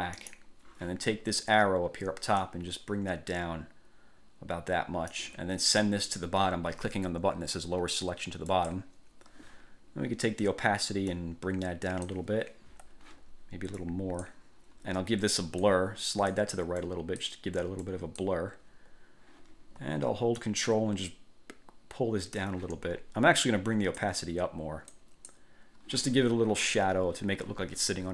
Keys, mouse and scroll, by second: 0.4 click, 2.6-5.5 drag, 8.7 click, 11.3-12.4 drag, 14.0 click, 15.8 click, 17.0 click, 18.0 click, 20.6-22.8 ctrl+drag, 23.6-24.4 drag, 25.0 click.